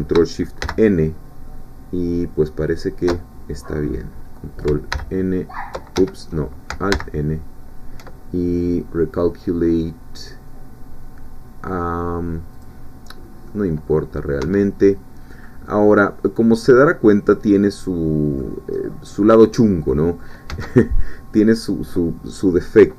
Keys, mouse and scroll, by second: 0.6 ctrl+shift+n, 4.9 ctrl+n, 6.0 Escape, 6.9 alt+n, 12.5 click, 13.2 scroll down 1, 13.5-15.6 middle drag, 14.4 Tab, 15.7-18.8 middle drag, 18.8-19.2 scroll up 2, 19.2 scroll down 2, 19.6 click, 20.5 Tab.